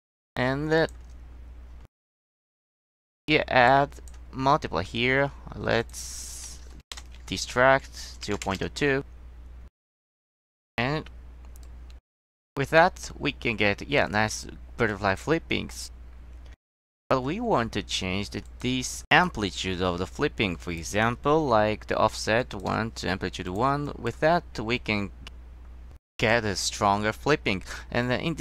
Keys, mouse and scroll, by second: 0.9 click, 2.4 click, 3.8 click, 4.5 middle click, 5.9 click, 6.6 space, 8.2 space, 8.4 KP_0, 8.5 KP_Decimal, 8.6 KP_0, 14.2 click, 15.0 click, 20.7 drag, 21.5 Tab, 22.5 drag, 23.6 click, 24.0 click.